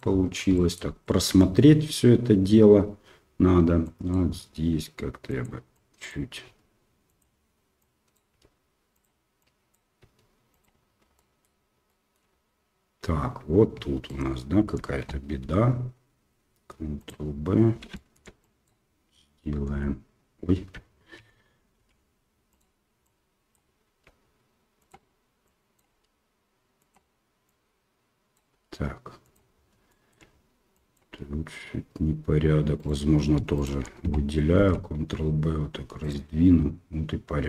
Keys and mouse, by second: 0.6 shift+middle click, 1.1 shift+middle click, 3.9 click, 4.3 g, 5.8 click, 6.4 g, 7.8 click, 8.3 g, 9.4 click, 10.0 g, 11.2 shift+middle click, 11.9 shift+middle click, 12.0 click, 14.0 alt+right click, 15.4 ctrl+b, 18.0 shift+click, 18.5 click, 19.7 h, 21.1 alt+h, 21.7 g, 23.0 click, 23.8 g, 25.6 click, 25.9 g, 27.4-28.5 drag, 28.5 g, 30.0 shift+middle click, 30.9 click, 31.1 g, 33.5 alt+click, 34.5 ctrl+b.